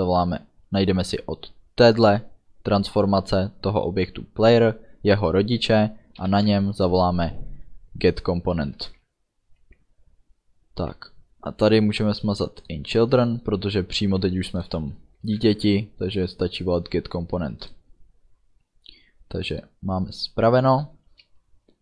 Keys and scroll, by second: 6.8 Delete, 7.3 End, 8.8 ctrl+s, 13.0 BackSpace, 15.4 ctrl+s.